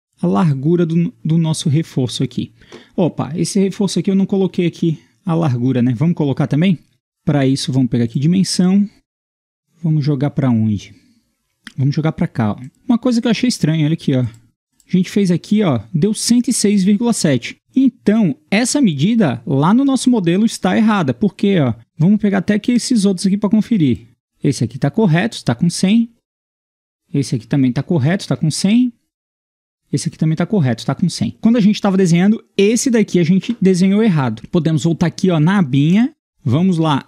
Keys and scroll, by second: 12.7 Escape, 28.3 Escape.